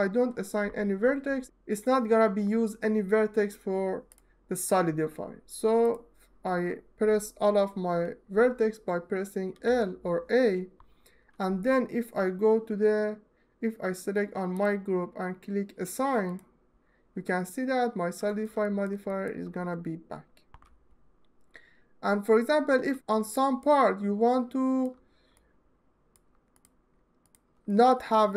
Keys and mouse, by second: 5.6 click, 9.3 l, 14.2 click, 16.0 click, 18.3 shift+middle click, 18.8 ctrl+alt+middle click, 23.1 alt+shift+middle click, 23.8 alt+click, 25.1 alt+middle click, 26.2 click.